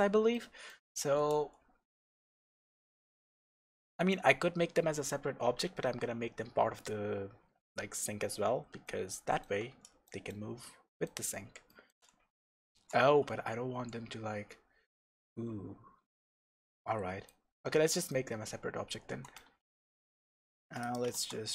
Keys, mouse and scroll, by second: 6.7-7.1 scroll down 1, 8.4 Tab, 12.1-13.0 scroll up 2, 13.0 Tab, 13.3-13.9 scroll down 2, 13.9-19.4 middle drag, 19.4 Tab, 19.9-20.8 middle drag, 20.8 click, 21.1 shift+s.